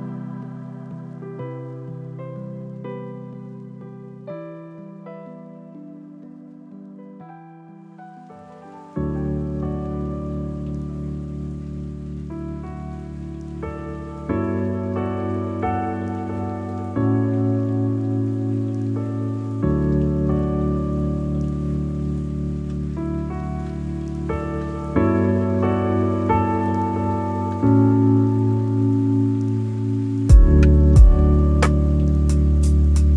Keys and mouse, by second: 1.5 click, 3.8-7.5 drag, 8.1-10.3 drag, 10.6-11.6 drag, 15.1 ctrl+i, 18.2 click, 20.9 click, 23.5 click, 25.7 click, 27.1-28.2 drag, 28.8 middle click, 30.4 click, 31.8 middle click.